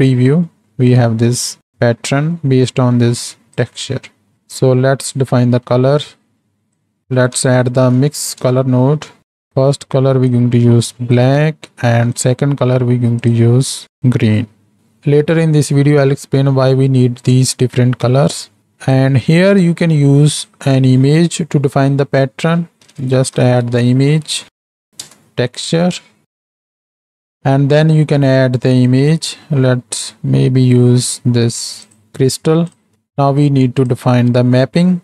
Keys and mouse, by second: 2.3 middle click, 2.6-5.4 drag, 4.5 x, 5.4 middle click, 6.7-9.4 drag, 17.6-18.0 middle drag, 19.0-26.2 drag, 26.3 click, 33.5-35.0 drag.